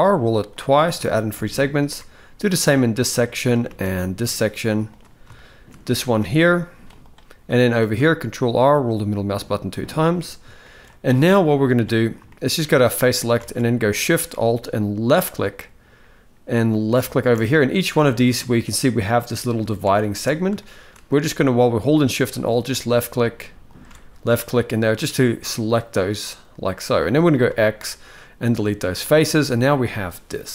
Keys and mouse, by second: 0.8 shift+middle click, 1.5 ctrl+r, 3.4 ctrl+r, 5.0-5.3 shift+middle drag, 5.7 ctrl+r, 7.5 ctrl+r, 10.3 shift+middle click, 11.4 click, 12.0 shift+middle click, 13.1 alt+a, 14.9 alt+shift+click, 17.9 shift+middle click, 20.3 shift+middle click, 22.0 alt+shift+click, 24.3 middle click, 25.9 middle click, 26.7 shift+middle click, 27.2 x, 28.6-30.0 middle drag.